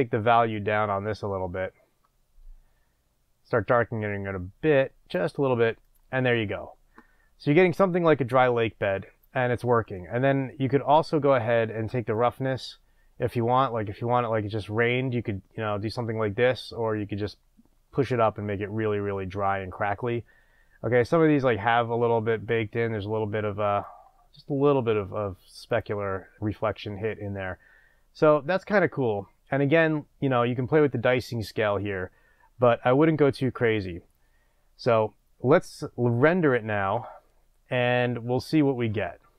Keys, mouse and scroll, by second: 5.9 click, 12.3-25.8 drag.